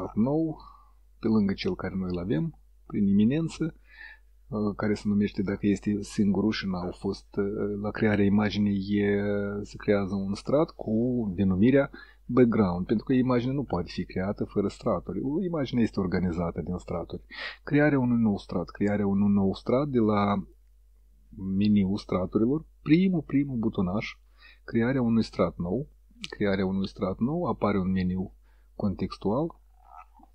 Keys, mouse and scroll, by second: 0.6-1.2 ctrl+scroll down 3, 1.2-1.7 ctrl+scroll up 2, 1.7 ctrl+middle click, 24.4-27.1 drag, 27.8-30.3 drag.